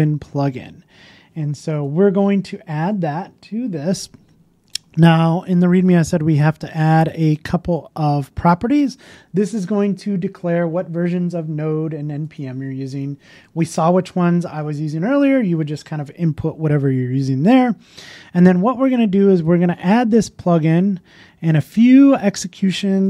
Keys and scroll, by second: 9.2 super+c, 13.0 super+v, 14.4 super+s.